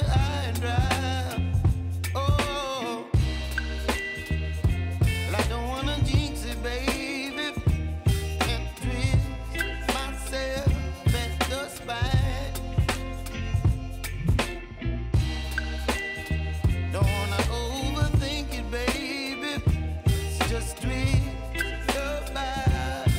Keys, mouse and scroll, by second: 1.9 Right, 3.0 Left, 4.1 click, 4.4 u, 5.9 click, 8.3 alt+scroll up 1, 11.1 click, 11.2 click, 11.6 scroll down 1, 20.0 click, 22.1 alt+scroll up 1.